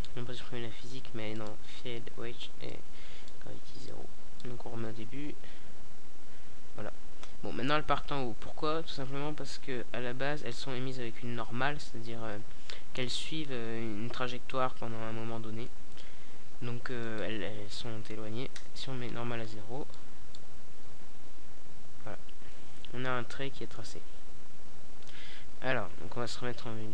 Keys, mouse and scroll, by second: 3.1 alt+a, 6.5 alt+a, 11.7-12.7 middle drag, 15.2-16.8 middle drag, 18.0-18.9 middle drag, 18.9 alt+a, 20.5-22.2 middle drag, 22.8 alt+a, 23.4 KP_0, 24.5-25.8 middle drag, 26.0 middle click.